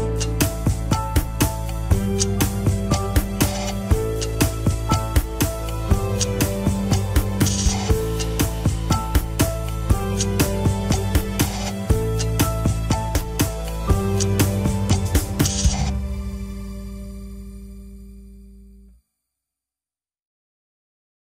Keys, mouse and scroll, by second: 2.5 scroll down 2, 2.7 middle click, 3.3 click, 3.9 scroll down 2, 4.0 middle click, 4.8 click, 5.1-5.6 scroll up 2, 5.3 shift+middle click, 6.2-10.9 drag, 10.9 scroll down 1, 11.1-13.7 middle drag, 13.7 scroll up 2, 16.5 click, 17.2 scroll up 2, 17.9 click, 18.2-18.7 scroll down 1, 18.7 scroll up 1, 19.1 click, 19.4 middle click, 20.2 click, 20.8-21.2 middle drag.